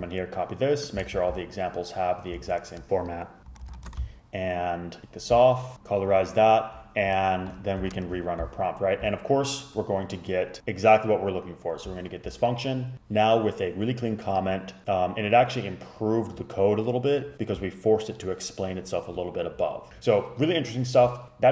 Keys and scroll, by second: 0.0 super+c, 1.1 super+v, 2.5 super+z, 3.1 super+v, 3.7 Up, 3.9 super+Left, 8.0 super+Return.